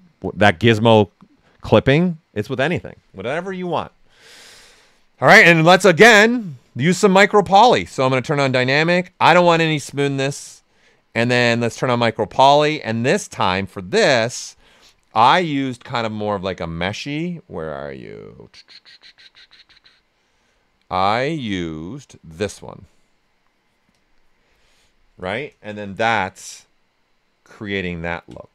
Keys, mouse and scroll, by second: 6.4 click, 7.3-11.6 drag, 9.1 typing, 23.9 click, 25.8 shift+f, 26.4-28.5 ctrl+right drag.